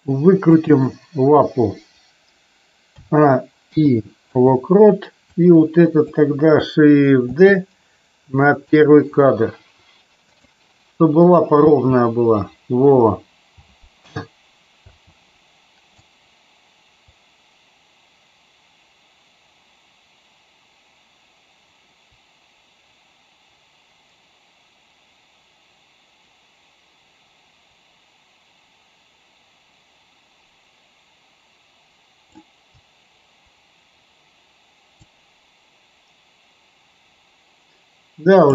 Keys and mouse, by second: 0.5 click, 3.0 a, 3.6 i, 5.2-6.1 drag, 7.3 shift+d, 10.2 click, 11.6 space, 14.9 space, 16.0-32.3 drag, 35.0-38.5 drag.